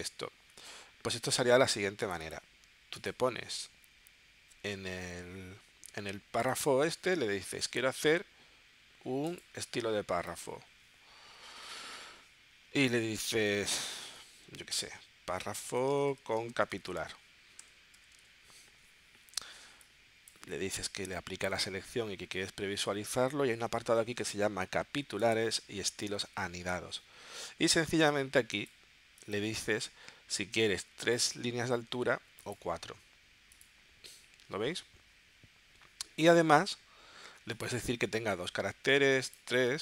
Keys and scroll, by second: 14.0-18.8 typing.